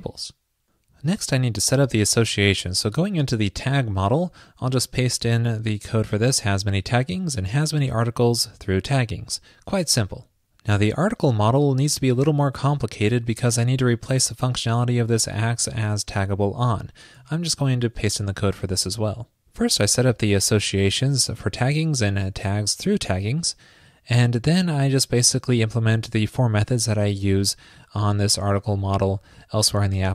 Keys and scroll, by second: 5.0 super+v, 9.7 super+s, 18.0 super+v.